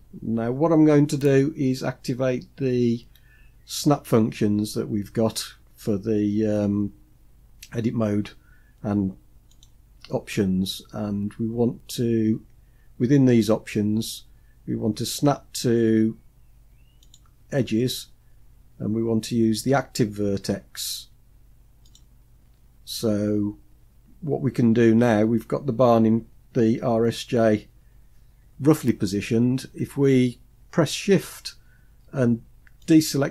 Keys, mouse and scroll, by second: 9.0-27.6 drag, 32.3 shift+click.